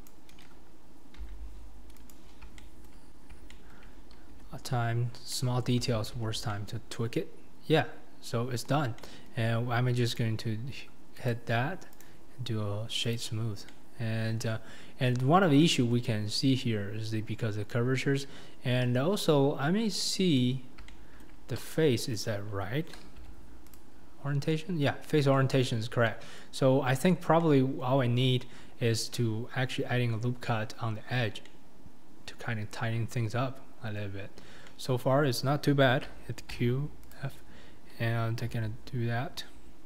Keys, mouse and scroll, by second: 0.1 Left, 1.3 g, 2.6 shift+middle click, 3.5 shift+middle click, 4.4 Tab, 4.6-5.3 scroll down 7, 5.3-5.9 middle drag, 5.9 alt+z, 6.1-6.5 scroll down 4, 6.5-8.8 middle drag, 8.8 scroll up 2, 9.0-10.2 middle drag, 10.2 click, 11.3 click, 13.1 right drag, 13.4 scroll up 4, 13.7-15.6 middle drag, 15.6 scroll up 1, 15.6-16.2 middle drag, 16.2-17.4 scroll up 3, 17.4-18.4 scroll down 2, 18.4-18.8 scroll down 3, 18.8 KP_1, 19.4-20.0 scroll up 2, 20.0 scroll down 1, 20.0-21.7 middle drag, 21.7 click, 22.2 click, 23.7 q, 24.2 scroll down 4, 24.5-25.5 middle drag, 25.5-26.0 scroll down 7, 26.0-26.7 middle drag, 26.7-27.4 scroll up 5, 27.4-28.0 middle drag, 28.0-28.5 scroll up 3, 28.5-29.4 scroll down 2, 29.4-29.9 scroll up 3, 29.9-31.2 scroll down 1, 31.2 scroll down 4, 31.4-34.2 middle drag, 34.2-34.7 scroll up 4, 34.7-37.1 middle drag, 37.1 q, 38.5 Tab.